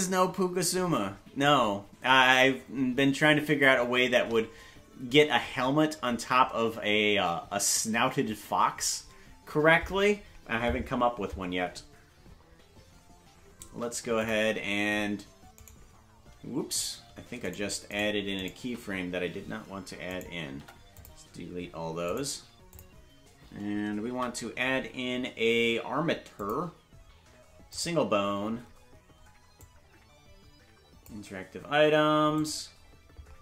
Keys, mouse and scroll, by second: 14.2 click, 15.6-17.5 right drag, 20.1 right click, 20.5 Delete, 22.1 right click, 22.7 click, 24.1 shift+a, 29.6-31.3 drag, 32.3 click.